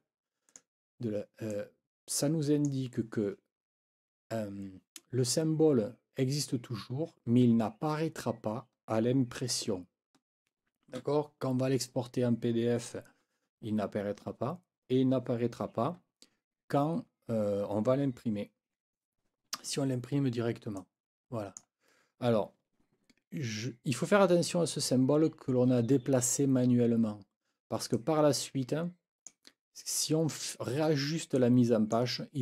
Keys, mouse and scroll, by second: 0.5 click, 1.5 click, 1.7-2.5 scroll up 2, 2.1 click, 2.5 click, 20.8 click, 27.9-29.5 drag, 31.3 click.